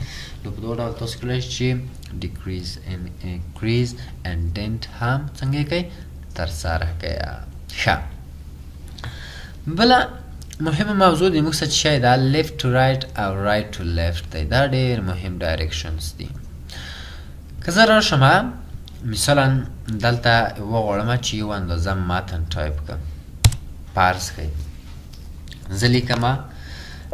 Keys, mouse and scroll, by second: 17.8-18.3 scroll down 1, 18.3-18.8 ctrl+scroll up 1, 19.0-19.5 ctrl+scroll up 1, 21.0 scroll up 1, 23.5 Return.